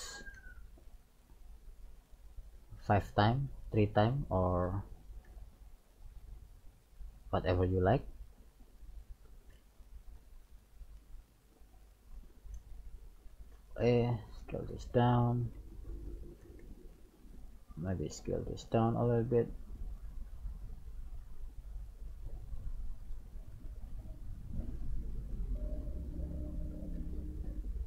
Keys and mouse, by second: 0.4 g, 1.8 right click, 2.8 e, 4.7 right click, 5.3 e, 8.7 right click, 9.5 e, 12.0-13.3 middle drag, 13.3 ctrl+a, 15.2 middle click, 15.4 middle click, 16.1 right click, 16.9 ctrl+a, 20.6 right click, 21.4 ctrl+a, 23.1 right click, 23.9 ctrl+a, 25.9 right click, 26.9 ctrl+a.